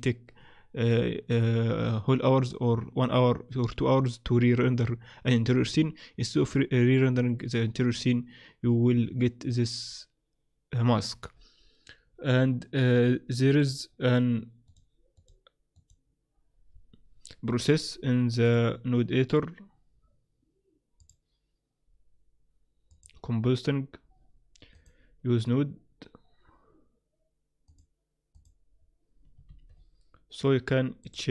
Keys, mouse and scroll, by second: 21.1 click, 22.9 click, 24.7 click, 28.3 click, 29.4 shift+a, 31.0 click.